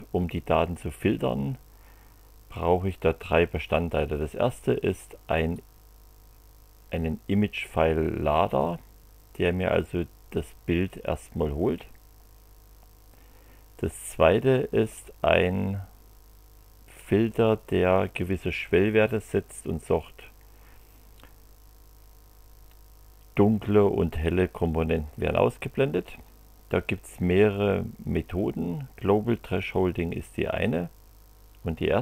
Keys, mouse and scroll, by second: 5.5-8.6 drag, 14.3-17.7 drag.